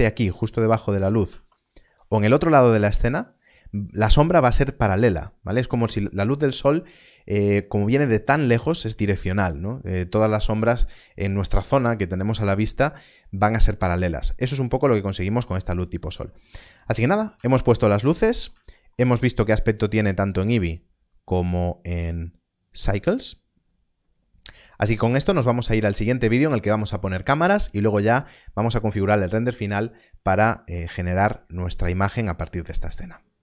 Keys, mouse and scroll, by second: 0.2 middle click, 1.6 shift+middle click, 15.7 shift+middle click, 16.2 middle click, 17.0 scroll up 1, 17.5 shift+middle click, 18.6 shift+middle click, 21.2 middle click, 21.2 click.